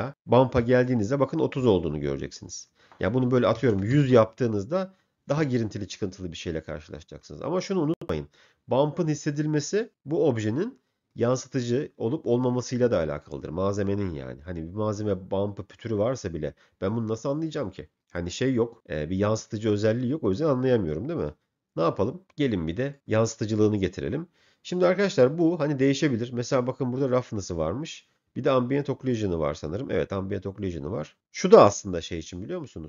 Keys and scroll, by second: 3.3 1, 3.6 0, 4.0 Return.